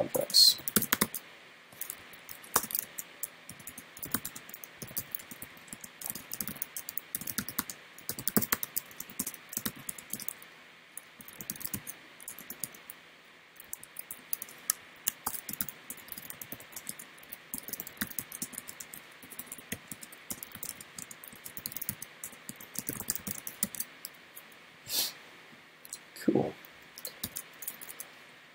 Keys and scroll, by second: 2.0 alt+Left, 14.8 alt+shift+Left, 27.3 super+..